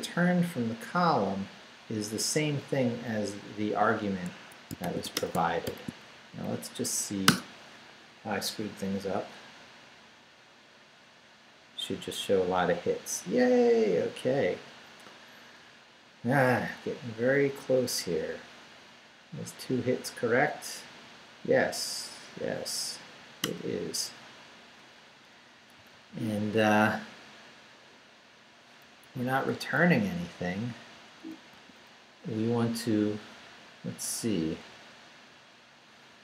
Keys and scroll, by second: 3.3 Down, 4.3 Escape, 4.6-5.6 typing, 6.2 shift+Up, 7.2 Return, 23.5 Return, 25.1 Up, 25.6 Right, 29.0 Down, 30.1 Up, 31.1 Up, 31.1 Right, 31.5 a.